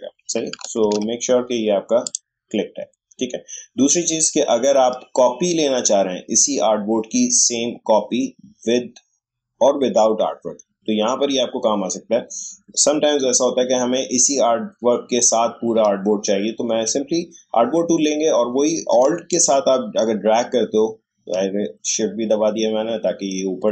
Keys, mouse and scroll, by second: 0.5 click, 0.8 ctrl+z, 2.0 click, 19.3-23.7 alt+drag.